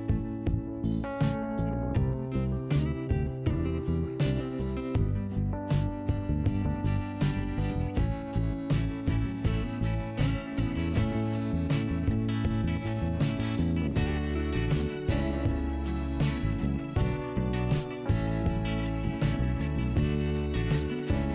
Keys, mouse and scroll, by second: 0.9 click, 3.5 click, 3.6 click, 3.8 click, 3.9 double click, 4.0 double click, 4.1 double click, 4.2 double click, 4.3 double click, 4.4 double click, 4.5 double click, 4.6 double click, 4.7 double click, 4.8 double click, 4.9 double click, 5.1 double click, 5.2 double click, 5.7 double click, 5.7 double click, 5.9 double click, 6.0 double click, 7.5 click, 9.5 scroll down 1, 10.4 scroll down 1, 12.3 click, 14.2-15.3 scroll up 1, 17.7 click, 17.9 click, 18.0 click.